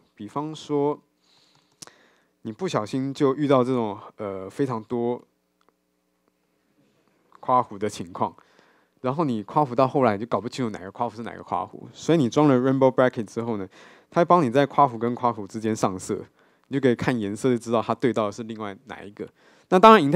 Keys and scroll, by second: 0.3 ctrl+shift+super+o, 1.5 Tab.